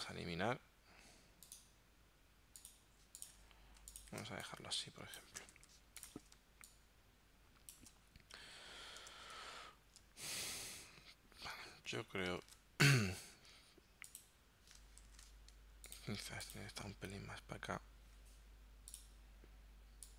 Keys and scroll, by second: 0.0 BackSpace, 3.4 z, 4.2 space, 5.6 v, 6.4 space, 9.3 super+Tab, 12.5 super+Tab, 15.2 shift+super+g, 17.1 shift+Right.